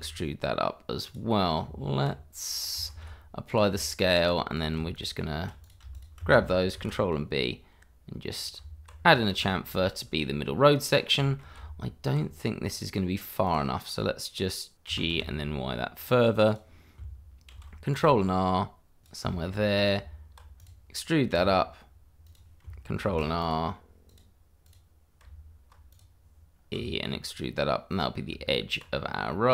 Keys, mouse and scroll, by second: 1.6 Tab, 2.5 middle click, 2.8 middle click, 2.9 ctrl+a, 3.5 click, 4.2 Tab, 4.5 click, 5.9 shift+click, 6.0 click, 6.7 ctrl+b, 8.3 click, 8.6 Tab, 9.0 scroll down 1, 9.5 shift+middle click, 9.8 middle click, 10.4-10.8 scroll up 1, 10.8 middle click, 12.2 Tab, 12.7 click, 13.1-13.4 scroll down 1, 13.4 click, 14.9 g, 16.4 click, 16.8 click, 17.5 ctrl+r, 17.9 click, 19.4 middle click, 20.0 Tab, 20.6 click, 21.3 e, 22.2 click, 23.0 ctrl+r, 23.4 click, 25.2 Tab, 25.9 click, 26.7 e, 27.9 click, 28.8 Tab, 28.9-29.3 scroll down 1, 29.3 middle click.